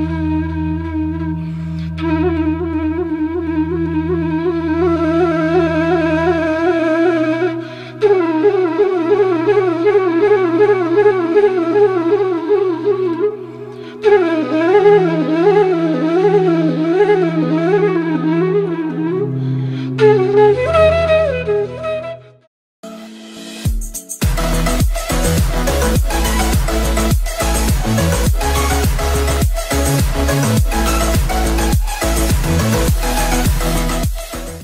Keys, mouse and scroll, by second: 2.2 click, 2.4 click, 2.6 alt+scroll down 1, 3.0 click, 3.3 alt+scroll down 1, 3.6 click, 5.1-6.5 drag, 6.5 alt+click, 7.5 right click, 7.9 click, 8.5 right click, 8.8-14.5 drag, 14.5-16.4 drag.